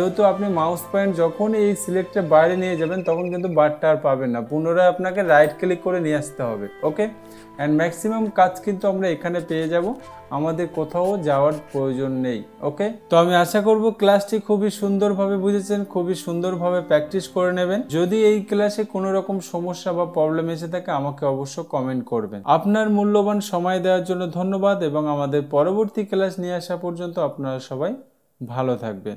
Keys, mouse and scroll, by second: 5.8 right click.